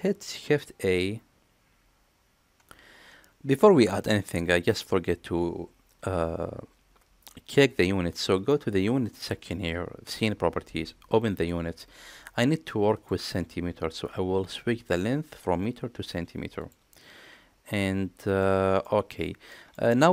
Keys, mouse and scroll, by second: 3.5 middle click, 11.4 click, 13.0-14.2 drag, 14.9-16.7 drag, 18.4-18.8 middle drag, 19.5 middle click.